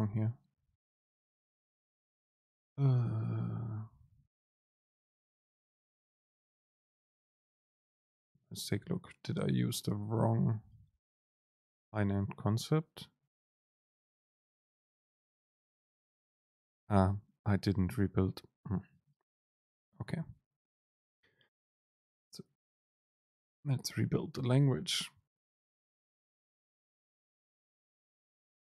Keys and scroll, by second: 2.5 Return, 3.3 super+space, 6.8 BackSpace.